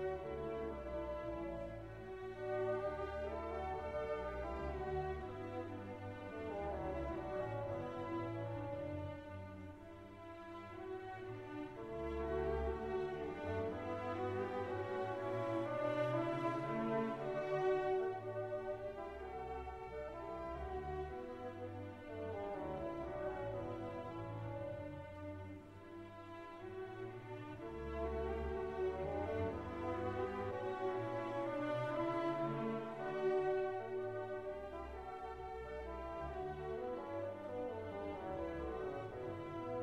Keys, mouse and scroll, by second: 1.2 scroll down 1, 3.6 click, 4.2 click, 4.7 click, 8.7 click, 12.1 click, 13.0 click, 14.5 1, 15.0 click, 16.1 3, 16.7 9, 17.4 click, 18.9 4, 19.4 1, 20.2 click, 22.1 click, 22.8 click, 23.9 click, 25.2 3, 26.4-31.1 drag, 31.7 click, 32.4 click, 34.3 click, 35.2 click, 36.5 click, 37.8 click, 39.1 click.